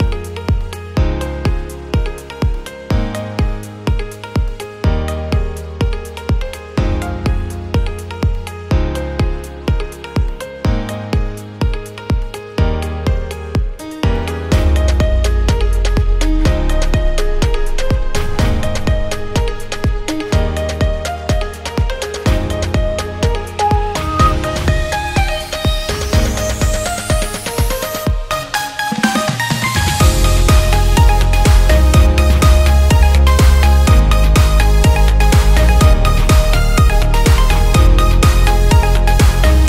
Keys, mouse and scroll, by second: 0.9-2.5 drag, 4.1 click, 5.5 click, 8.5 click, 8.9-9.9 drag, 10.4 click, 11.5-16.0 drag, 17.8 click, 20.5 click, 21.7-25.5 drag, 27.7 click, 28.5 click, 29.8-33.4 drag, 35.2 click, 36.0 click, 36.3 click, 37.6-39.6 drag.